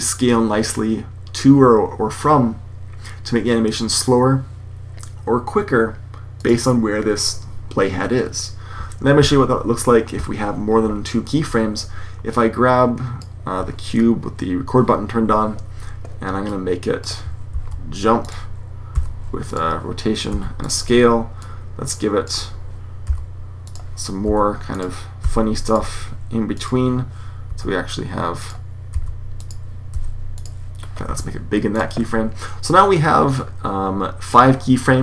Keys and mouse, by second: 9.1 super+z, 12.2 click, 17.4 g, 18.8 r, 19.9-20.4 drag, 20.1 s, 22.0 click, 23.0 g, 24.1 s, 25.1 r, 26.4 click, 27.3 s, 27.5-28.2 drag, 28.8 drag, 28.8 g, 29.5-30.0 drag, 29.7 r, 30.9 s.